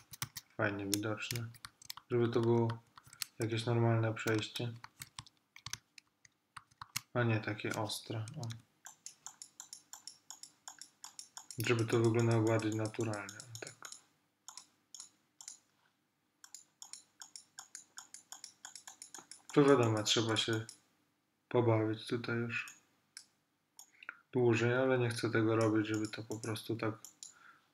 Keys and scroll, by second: 0.1 super+z, 2.1 alt+super+z, 4.9 alt+super+z, 6.2 alt+super+z, 8.4 ].